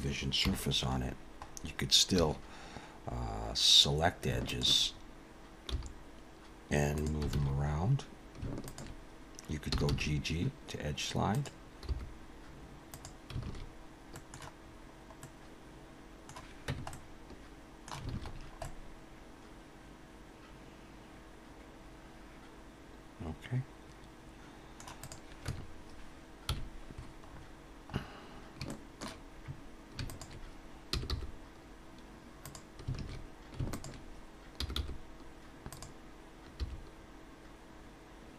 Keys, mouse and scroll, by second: 0.4 KP_7, 1.5 scroll up 2, 2.2 2, 4.5 alt+shift+click, 5.7 g, 7.3 alt+a, 8.6 alt+shift+click, 9.7 g, 12.1 g, 13.4 alt+a, 14.1 middle click, 14.6 scroll down 3, 15.1 middle click, 16.7 Tab, 16.9 middle click, 18.1 alt+a, 18.3-18.9 scroll down 4, 18.6 middle click, 25.0 click, 25.5 Tab, 26.5 KP_1, 27.3-28.2 scroll up 6, 28.7 shift+middle click, 30.1 alt+shift+click, 30.9 g, 33.0 alt+a, 33.7 alt+shift+click, 34.6 g, 36.6 g.